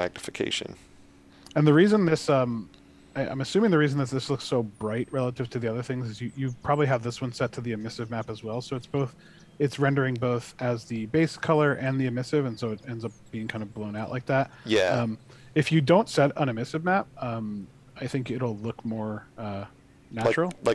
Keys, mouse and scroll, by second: 3.8-4.9 typing, 6.6 a, 8.7 shift+a, 9.2 shift+w, 10.1 shift+d, 11.9 shift+s, 13.4 shift+d.